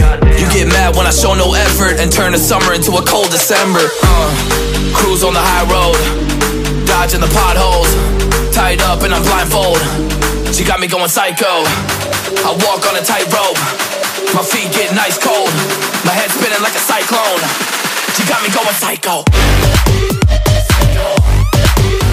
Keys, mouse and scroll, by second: 3.2-3.9 alt+scroll down 2, 4.0-4.5 alt+scroll up 2, 6.6 scroll down 1, 6.8-7.2 scroll up 1, 15.9 double click, 16.3 Up, 16.3 Up, 17.1 double click, 21.0 alt+scroll down 1, 21.3 alt+scroll up 1, 21.5-21.8 alt+scroll down 2, 21.9 alt+scroll up 1.